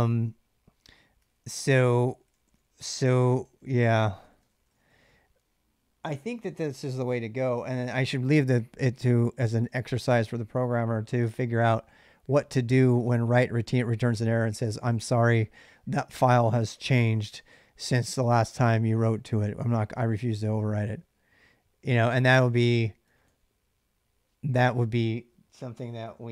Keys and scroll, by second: 1.0-5.2 typing, 12.2 j, 12.3 j, 12.9 j, 22.3 k, 22.9 k.